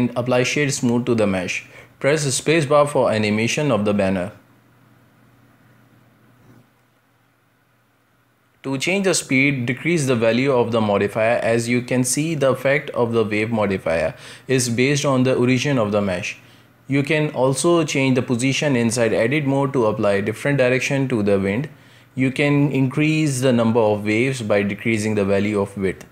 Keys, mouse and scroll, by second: 1.8 shift+middle click, 2.3-2.6 scroll down 1, 2.6 space, 4.1-6.1 middle drag, 6.1-7.3 scroll up 1, 7.3-8.7 middle drag, 8.7-11.7 drag, 15.4 scroll down 1, 15.6-16.5 middle drag, 16.5-17.1 scroll up 1, 17.1-26.1 middle drag.